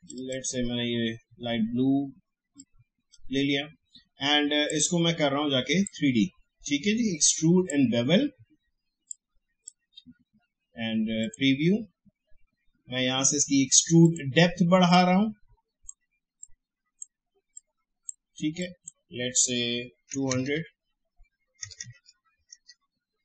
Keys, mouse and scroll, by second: 2.6-11.2 drag, 14.0-18.6 drag, 21.6 BackSpace, 22.9-23.2 typing.